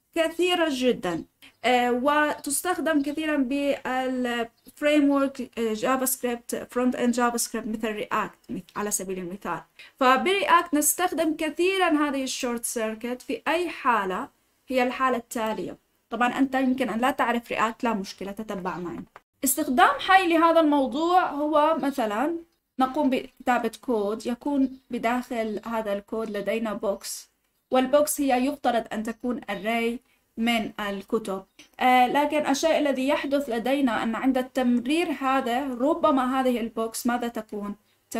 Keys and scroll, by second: 16.2 ctrl+z.